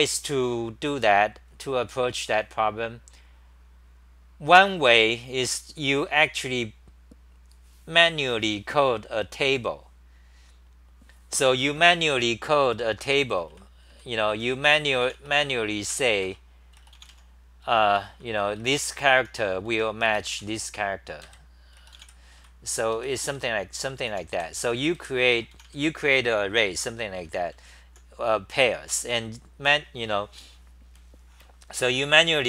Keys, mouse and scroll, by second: 12.6 Return, 12.8 Return, 13.0 Return, 13.1-15.5 typing, 16.2 Return, 17.7 Return, 17.8 Return, 19.2 t, 19.7 n, 21.2 ctrl+g, 22.4 c, 23.0 ,, 24.1 u, 24.6 Home, 25.6 d, 27.5-28.0 h, 28.9 h.